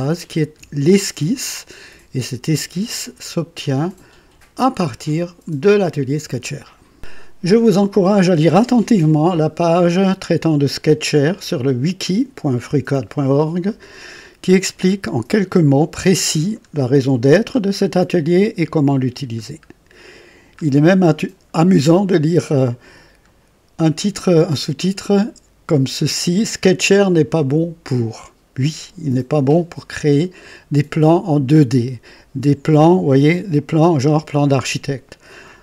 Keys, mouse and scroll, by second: 14.2-14.8 scroll down 3, 16.3 scroll down 2, 17.2-17.6 scroll down 2, 18.7 scroll down 2, 20.0-20.5 scroll down 4, 21.2 scroll down 2, 22.1 scroll down 2, 22.8-23.2 scroll down 2, 33.5 click.